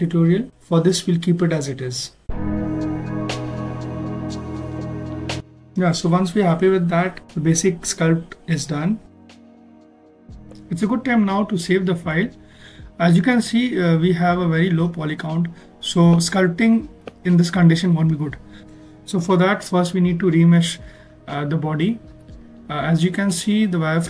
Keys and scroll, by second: 5.1 ctrl+alt+s, 5.6 ctrl+alt+s, 11.1 ctrl+s, 16.8 ctrl+z, 18.7 z, 19.8 ctrl+alt+z, 21.6 shift+f.